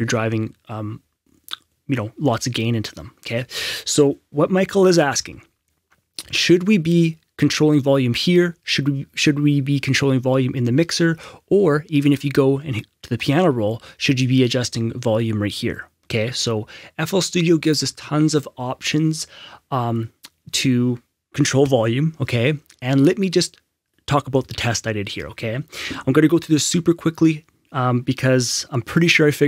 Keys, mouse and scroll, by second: 5.1 F6, 12.0 F6, 12.0 right click, 13.2 click, 17.6 click, 17.7 Escape.